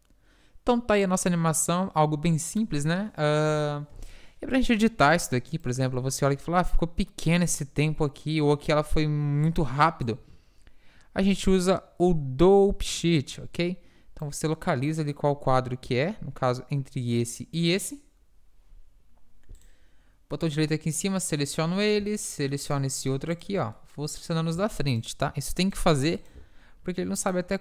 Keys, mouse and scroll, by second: 4.8 Escape, 5.7-7.8 drag, 11.5-13.3 drag, 14.3-15.9 drag, 17.8-19.8 drag, 19.8-21.7 right drag, 21.7-23.5 middle drag, 23.5-24.6 right drag, 25.1-27.6 drag.